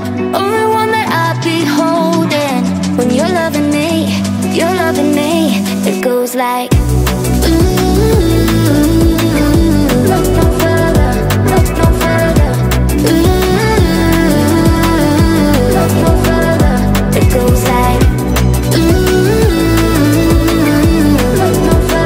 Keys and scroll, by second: 6.0-9.6 typing, 11.3 space, 12.2 b, 12.7 space, 12.8 h, 14.0-15.3 typing.